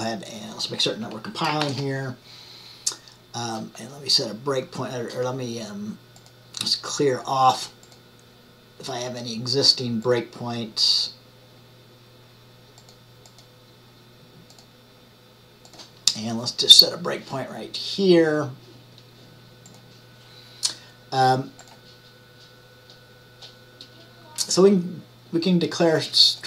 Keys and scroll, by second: 1.7 ctrl+shift+@.